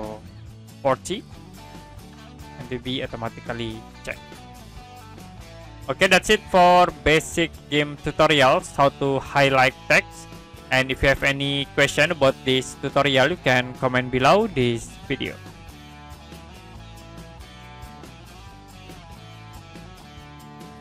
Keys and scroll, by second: 0.7 4, 1.0 0, 1.8 Return, 15.7 Print.